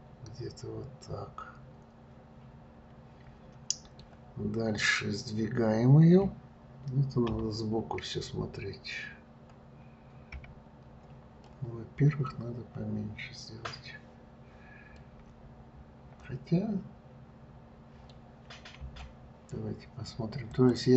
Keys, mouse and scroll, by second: 7.6 KP_3, 10.7 KP_1, 11.8-14.8 middle drag, 15.3-18.4 middle drag.